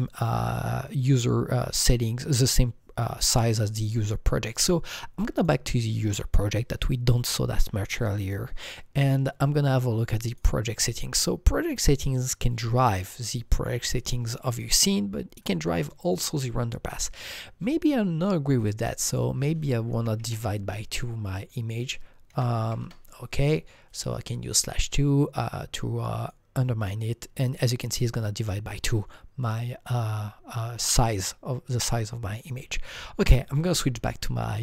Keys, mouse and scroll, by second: 5.3 click, 5.3-8.0 drag, 8.2 click, 10.2 click, 15.4 click, 16.0 click, 19.1 click, 19.9 KP_Divide, 20.2 KP_2, 21.3 click, 22.3 KP_Divide, 22.6 KP_2, 22.8 Return, 23.4 KP_Divide, 23.4 KP_2, 23.9 click, 24.0 KP_2, 26.1 click, 32.4 click.